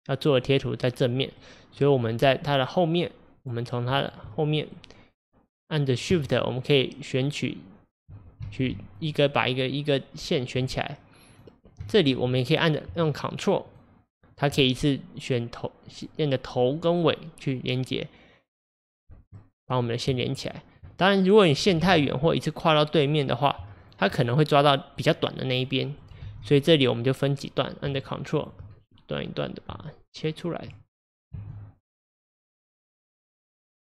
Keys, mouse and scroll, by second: 2.0 scroll up 4, 2.4-3.4 middle drag, 3.4 click, 4.3-6.3 middle drag, 6.3 shift+click, 7.3 shift+click, 8.5 ctrl+z, 9.0 shift+click, 9.6 shift+click, 11.9-13.7 shift+middle drag, 13.7 ctrl+click, 17.2-20.5 middle drag, 20.5 ctrl+click, 21.0 middle click, 21.8 ctrl+z, 22.1-23.9 middle drag, 23.9 ctrl+click, 24.3-26.1 middle drag, 26.1 scroll down 1, 26.3 ctrl+z, 26.8-27.7 scroll up 2, 27.7-28.5 scroll up 1, 28.5 ctrl+Left, 28.8-30.2 middle drag, 30.2 ctrl+click, 31.4 ctrl+z, 32.2 ctrl+Left, 33.6 ctrl+Left.